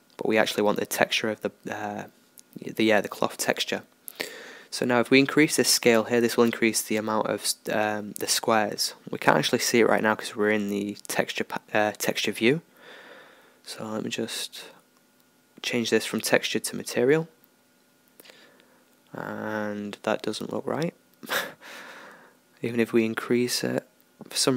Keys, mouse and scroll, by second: 4.3-6.1 drag, 8.9-10.9 middle drag, 11.3-13.2 drag, 14.8-17.6 drag, 19.2-24.5 middle drag.